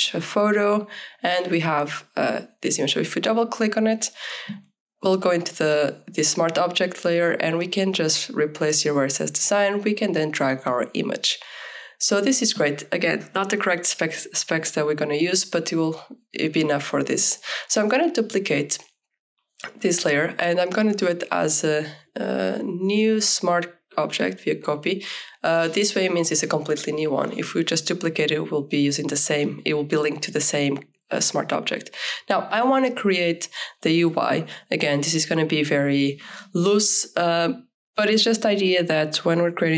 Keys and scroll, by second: 14.9 ctrl+s, 29.2 shift+u, 29.5 shift+i, 29.7 Return, 33.7 Delete.